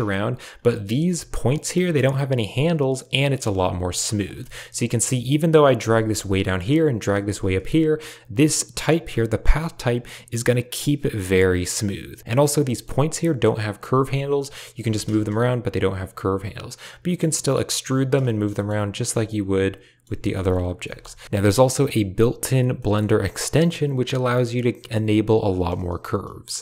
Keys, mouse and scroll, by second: 0.4 click, 0.8 g, 3.1 click, 3.3 g, 4.3 shift+click, 5.6 click, 5.7 g, 6.9 click, 7.1 g, 12.1 click, 12.2 g, 12.3 click, 12.5 g, 14.3 click, 14.7 g, 15.9 e, 18.3 e, 19.0 Tab, 19.1 click, 19.9 Tab, 20.5 click, 20.7 g, 21.4 middle click, 21.6 shift+middle click, 22.6 middle click.